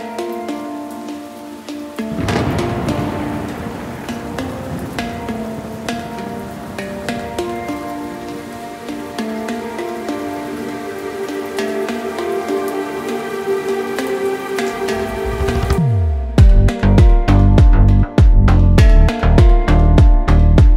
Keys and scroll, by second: 3.8 s, 8.0 g, 11.6 Escape, 12.5 g, 18.1 g.